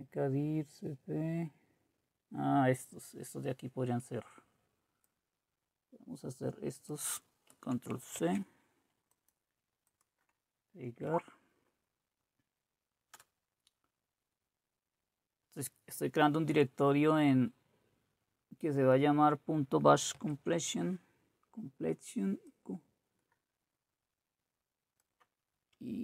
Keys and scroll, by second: 11.1 Right, 13.1 Return, 20.2 alt+Tab.